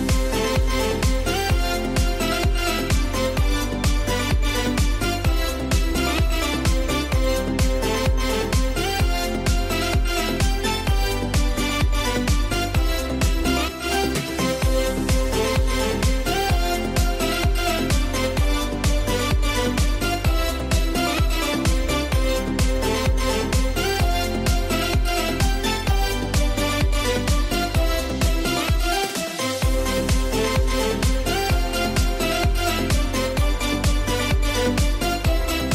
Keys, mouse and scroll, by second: 0.7 click, 0.9 ctrl+0, 0.9 click, 1.4 space, 1.5 click, 1.9 space, 2.3-5.1 drag, 5.8 ctrl+a, 10.5 click, 10.8 j, 11.3-15.1 drag, 15.7 scroll down 1, 16.1 scroll up 1, 16.7-22.8 drag, 22.8 g, 23.6-31.7 drag, 31.7 scroll up 1, 32.2-33.6 drag, 33.6 z, 33.9-35.3 drag.